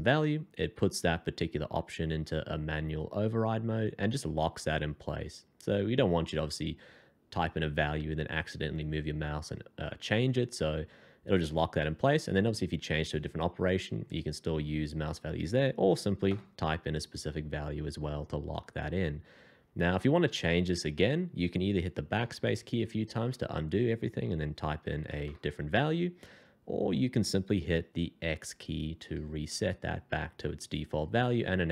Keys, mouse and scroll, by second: 16.2 ctrl+KP_0, 22.2 BackSpace, 22.4 BackSpace, 22.8 BackSpace, 24.9 2, 25.1 0, 25.2 0, 29.0 x.